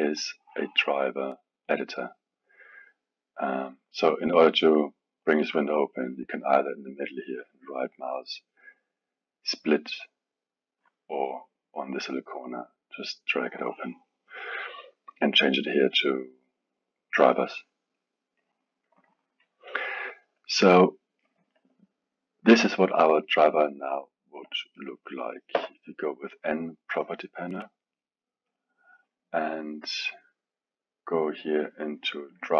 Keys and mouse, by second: 0.2-7.9 drag, 7.9-12.9 right drag, 12.9-20.5 drag, 20.5-25.5 middle drag, 25.5 n, 27.6-28.6 drag, 32.4 click.